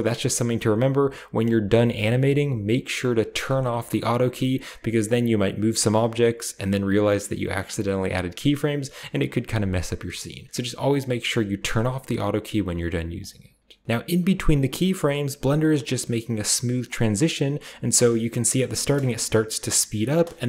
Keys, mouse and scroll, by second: 1.2-1.7 drag, 3.3 click, 11.5 click, 13.0 click, 13.8-18.2 drag, 13.8 space, 18.6 space, 20.4 click.